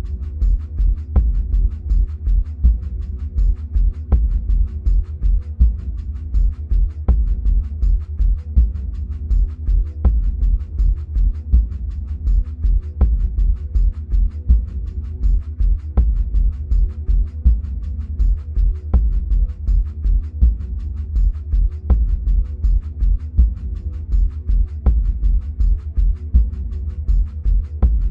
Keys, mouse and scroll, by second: 8.0-10.0 drag, 11.9-19.0 drag, 20.9-28.1 drag.